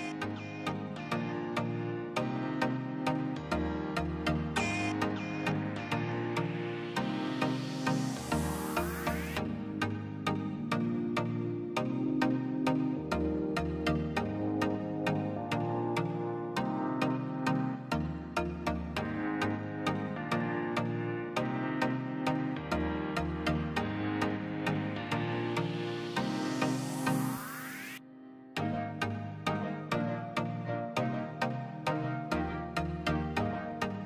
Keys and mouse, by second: 1.6-4.6 drag, 8.3 middle click, 8.7-10.5 middle drag, 10.5 q, 12.0 click, 13.3-14.8 middle drag, 14.8-17.1 drag, 17.8 click, 21.1-23.5 drag, 24.7-26.3 drag, 27.0-28.6 drag, 28.9 click, 29.4 middle click, 30.1 click, 30.4 shift+a, 33.7 click.